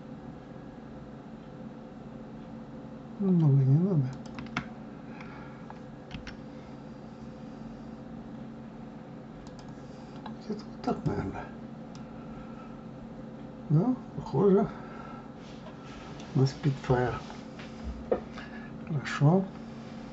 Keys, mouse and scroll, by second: 11.2 click, 12.3-15.3 middle drag, 17.3 KP_3.